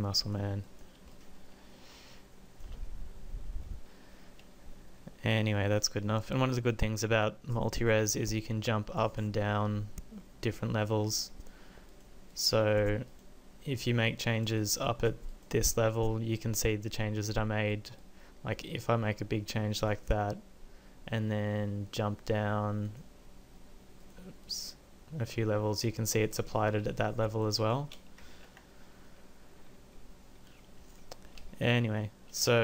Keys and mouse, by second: 14.8-17.7 drag, 18.4-20.1 drag, 22.9-24.7 drag, 28.4 ctrl+z.